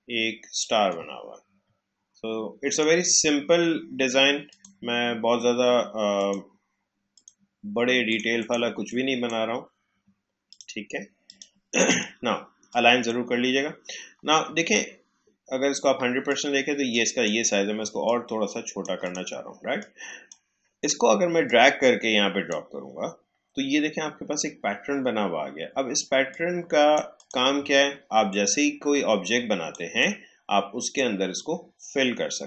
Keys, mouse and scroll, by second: 14.5-15.9 alt+scroll down 1, 16.2 click, 18.0-25.0 shift+drag, 26.3-32.4 drag.